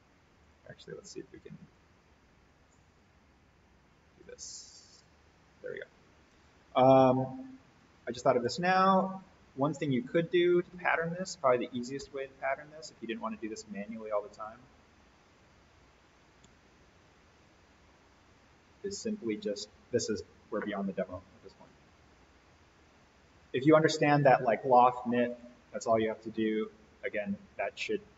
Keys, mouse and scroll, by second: 7.1-8.0 drag, 10.5 alt+s, 12.7 click, 14.8 Escape, 17.3 click, 18.6 Escape, 19.2 click, 23.1 ctrl+click, 27.5 ctrl+click.